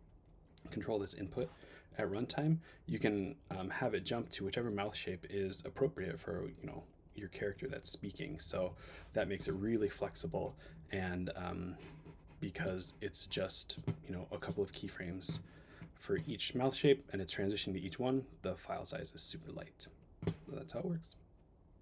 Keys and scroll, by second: 1.9 Up, 3.1 Up, 3.4 Down, 3.7 Up, 4.1 Down, 4.4 Up, 4.6 Down, 4.8 Up, 5.6 Down, 6.0 Up, 6.6 Up, 7.1 Down, 7.3 Up, 7.7 Down.